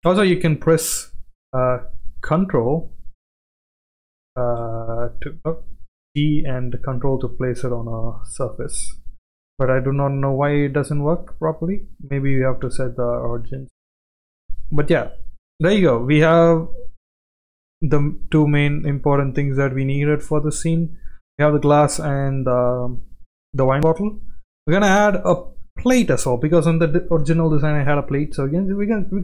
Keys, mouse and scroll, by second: 0.2 shift+middle click, 1.9 click, 2.2 g, 3.5 g, 5.9 g, 9.3 g, 11.0-11.7 middle drag, 12.3 g, 14.5 click, 14.8-15.1 middle drag, 15.6 shift+middle drag, 17.5 click, 18.5 shift+middle drag, 19.7-20.0 shift+middle drag, 21.3 click, 21.7 shift+middle drag, 23.3-24.0 middle drag, 25.1 shift+middle click, 25.9 shift+right click, 27.2 KP_7.